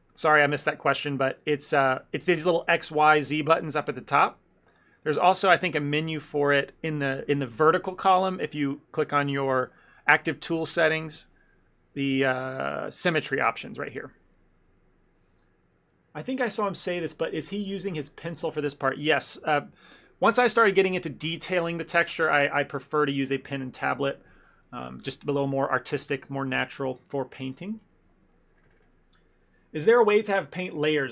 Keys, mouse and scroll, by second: 0.2 middle click, 4.2 click, 4.8 click, 5.7-6.4 scroll down 14, 7.8-9.4 scroll down 3, 13.2 click, 14.0 click.